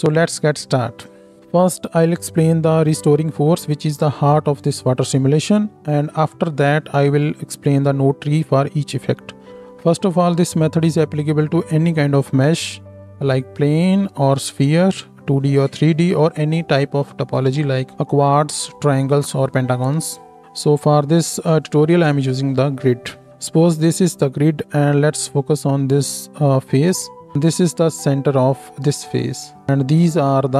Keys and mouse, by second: 0.0-29.7 drag, 29.7-30.5 middle drag.